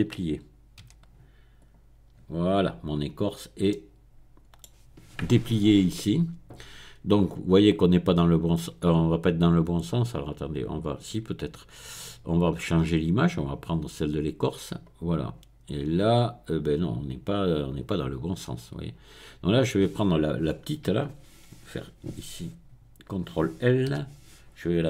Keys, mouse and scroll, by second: 0.7 middle click, 0.9 u, 1.6 click, 2.1 middle click, 3.0-3.6 scroll up 1, 3.6-4.6 middle drag, 4.6-5.2 scroll down 1, 5.2-5.5 scroll down 1, 5.5-6.8 scroll up 1, 6.8-8.4 middle drag, 12.9 click, 13.5 middle click, 14.1 click, 14.4-18.6 middle drag, 19.3 click, 23.9 ctrl+i.